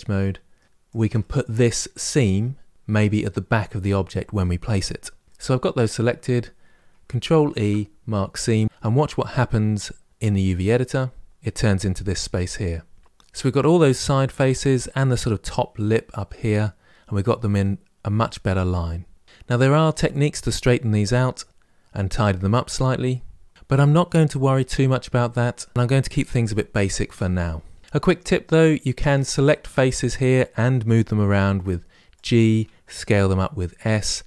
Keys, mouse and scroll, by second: 0.6 shift+click, 0.7 shift+click, 0.9-11.3 middle drag, 28.8 click, 29.9 click, 30.8 g, 32.8 s.